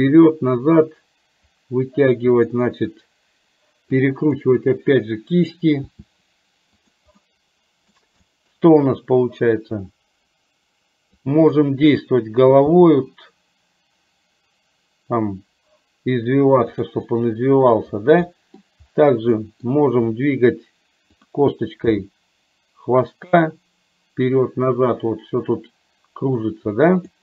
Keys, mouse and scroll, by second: 0.2-2.9 middle drag, 4.4-5.6 middle drag, 5.9 r, 7.3 middle click, 8.3 middle click, 11.3 click, 12.8 g, 17.2 middle click, 18.4 middle click, 19.4 middle click, 21.9 g.